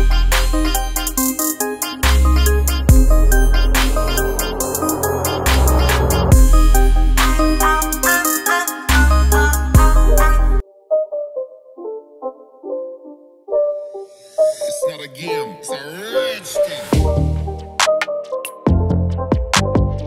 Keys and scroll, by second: 0.3 alt+space, 6.9 ctrl+alt+shift+z.